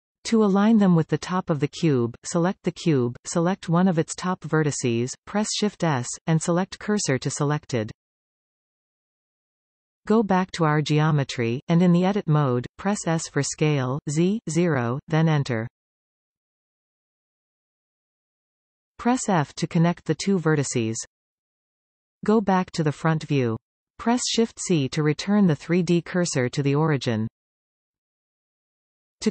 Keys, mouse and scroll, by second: 0.2 e, 1.8-2.2 scroll down 5, 2.4-3.4 middle drag, 3.4 Tab, 4.0 click, 4.4 Tab, 5.4 shift+s, 9.8 Tab, 11.4 click, 12.0 Tab, 14.6 s, 19.6 f, 23.4 KP_1, 25.7 shift+c, 26.3-27.0 scroll up 6, 27.5-29.3 shift+middle drag.